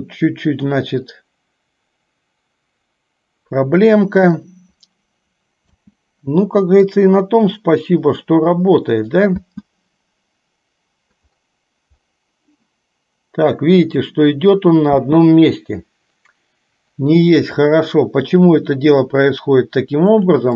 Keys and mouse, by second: 6.0 space, 6.9-9.5 drag, 9.5 space, 15.1 space, 20.1 click.